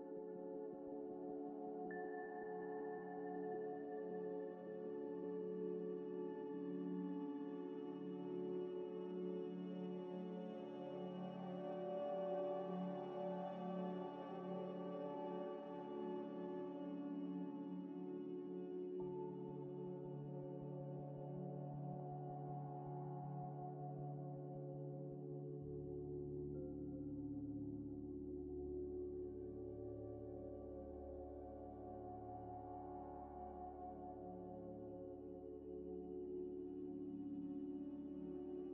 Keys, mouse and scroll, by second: 0.6 Tab, 0.8 Tab, 1.3 Tab, 2.3 middle click, 2.6 s, 4.1 ذ, 4.5 scroll up 1, 4.7 ئ, 6.0 Tab, 8.1 ه, 8.3 scroll up 1, 9.9 1, 10.1 1, 10.2 scroll up 1, 10.5 ctrl+ق, 13.2 ئ, 14.0 g, 15.1 ctrl+r, 15.9 ctrl+ق, 16.7 4, 17.5 1, 17.7 1, 18.2 shift+click, 19.1 middle click, 19.7 scroll down 1, 20.0 scroll up 1, 20.6 ئ, 21.1 ذ, 21.5 scroll up 1, 22.6 2, 23.1 alt+click, 24.8 ئ, 25.6 ctrl+ق, 26.9 1, 27.3 scroll down 1, 27.6 scroll up 1, 28.0 scroll down 1, 29.3 scroll up 1, 30.2 scroll up 1, 30.4 alt+click, 31.0 g, 31.7 ctrl+r, 32.4 ctrl+ق, 32.4 ctrl+click, 32.7 ctrl+ئ, 33.0 ctrl+ق, 34.4 ctrl+ق, 36.0 shift+click, 37.0 shift+click, 37.5 shift+click, 37.6 ئ, 38.6 shift+click.